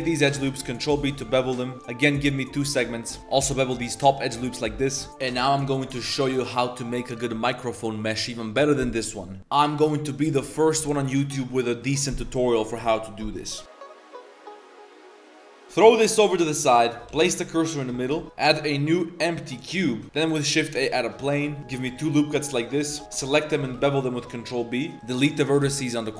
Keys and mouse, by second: 0.3 ctrl+b, 2.9 Tab, 3.2 ctrl+b, 3.4 ctrl+b, 15.6 ctrl+g, 16.3 drag, 16.8 drag, 17.1 shift+s, 17.9 shift+drag, 19.8 shift+a, 21.6 ctrl+r, 21.9 ctrl+r, 22.3 1, 22.9 2, 23.0 alt+click, 23.4 alt+shift+click, 23.7 ctrl+b, 24.9 ctrl+z, 24.9 shift+click, 24.9 x, 25.6 x.